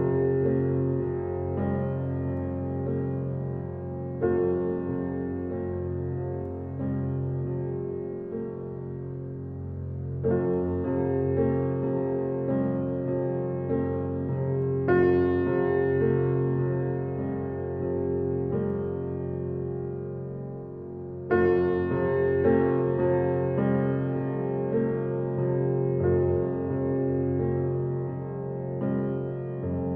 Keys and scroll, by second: 0.7 Left, 3.0 Left, 4.4 Left, 9.3 Left, 11.5 Left, 13.1 Left, 14.7 Left, 17.1 Left, 19.3 Left, 22.0 Left, 24.0 Left, 25.5 Left.